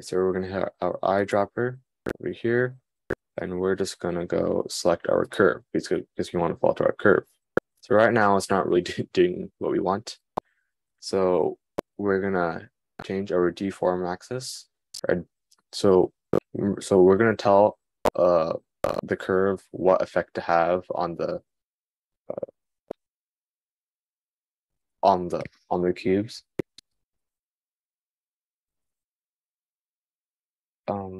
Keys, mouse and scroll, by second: 0.6-31.1 middle drag.